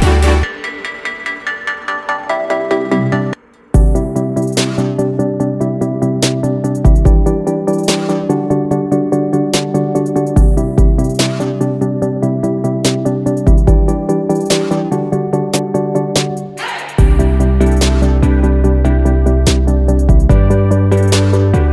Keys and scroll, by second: 9.5 ctrl+0.